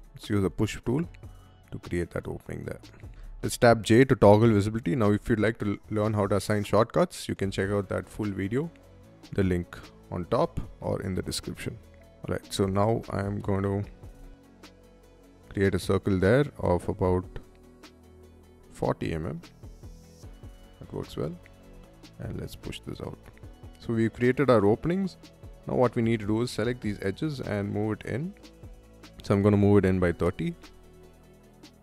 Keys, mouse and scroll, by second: 0.7 click, 1.3 middle click, 2.4 shift+middle click, 2.9 j, 3.4 middle click, 4.3 middle click, 4.7 c, 12.1 Right, 12.4 Left, 13.1 Right, 13.9 Up, 17.9-18.8 typing, 19.3 middle click, 19.6 middle click, 20.0 e, 20.3 click, 20.8 space, 21.0 click, 21.7 click, 21.7 p, 22.2 click, 22.6 middle click, 23.1 scroll down 1, 23.4 middle click, 25.0 space, 25.2-25.5 drag, 25.9-26.2 scroll up 1, 26.2 middle click, 27.1 click, 27.1 m, 29.4 3, 29.7 Return, 30.8 middle click, 31.3 space, 31.6 click.